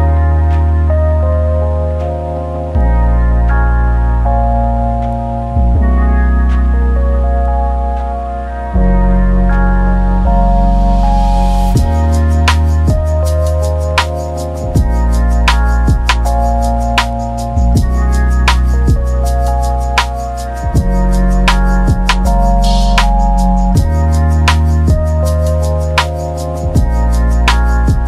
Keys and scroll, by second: 4.3 ctrl+1, 6.9 ctrl+1, 10.3-11.2 typing, 14.1 ctrl+1, 17.2 v, 17.4 v, 17.9 v, 20.1 ctrl+z, 24.6 Return, 27.3 Return.